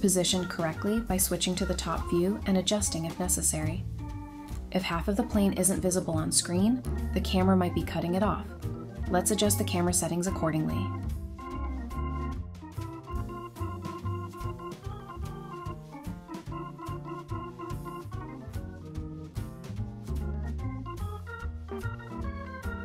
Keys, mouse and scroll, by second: 1.2 scroll up 1, 3.8-4.7 typing, 6.4 Return, 10.4 right click, 10.9-11.3 typing, 12.6 Return, 13.7 typing, 14.0 Return, 14.7 double click, 15.3-15.8 scroll down 1, 15.8-16.7 typing, 22.7 h.